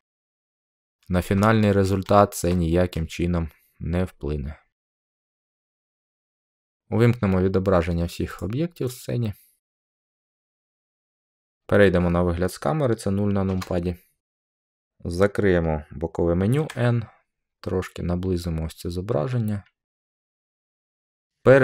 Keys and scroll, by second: 13.4 0, 16.5 n.